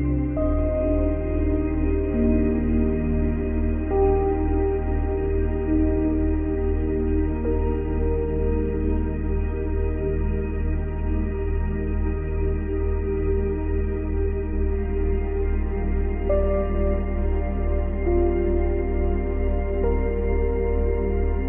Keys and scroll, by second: 1.8 space.